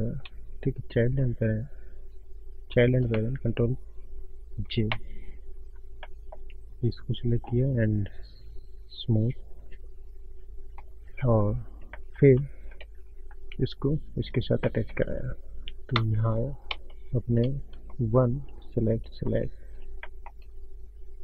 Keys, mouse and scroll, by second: 0.3 click, 0.7 click, 1.1 shift+click, 1.7 click, 2.7 click, 2.9 shift+click, 5.0 ctrl+j, 5.8 click, 6.1 middle click, 6.5 click, 7.1 click, 7.5 right click, 9.0 right click, 10.0 click, 10.0 scroll down 4, 11.1 click, 11.3 scroll up 4, 11.5 middle click, 12.3 ctrl+middle click, 13.2 Tab, 13.9 scroll up 1, 14.0 middle click, 14.7 shift+middle click, 16.0 Tab, 16.8 Tab, 18.9 1, 18.9 shift+click, 19.7 middle click.